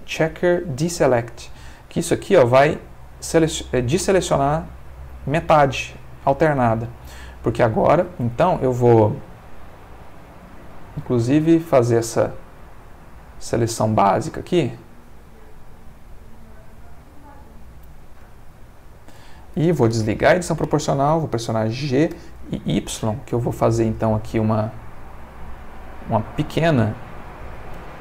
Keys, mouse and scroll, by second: 2.5 click, 5.3 middle click, 6.9 middle click, 8.4 middle click, 9.9 alt+shift+click, 10.6 alt+shift+click, 11.1 alt+shift+click, 11.6 alt+shift+click, 12.0 alt+shift+click, 13.1 alt+shift+click, 13.6 alt+shift+click, 14.1 alt+shift+click, 14.6 alt+shift+click, 15.1 alt+shift+click, 15.6 alt+shift+click, 16.1 alt+shift+click, 16.7 alt+shift+click, 17.6 alt+shift+click, 18.6 alt+shift+click, 19.3 alt+shift+middle click, 20.2 o, 21.1 click, 22.1 g, 22.4 y, 23.8 space, 24.1 click, 24.9-27.8 middle drag, 27.9 Caps_Lock.